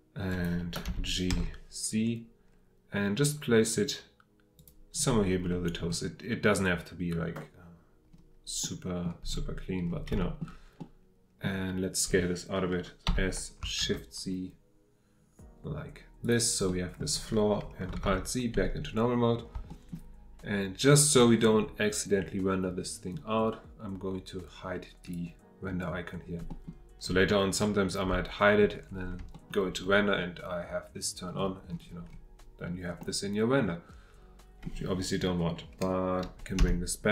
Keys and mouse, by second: 0.3 click, 0.8 g, 1.3 z, 4.6 click, 8.7-9.0 middle drag, 10.2 shift+middle drag, 10.9 middle click, 13.8 shift+z, 16.2 click, 16.7 click, 18.0 alt+z, 19.8 shift+click, 26.5 click, 28.0 h, 29.3 shift+click, 33.0-34.6 middle drag, 36.6 F8.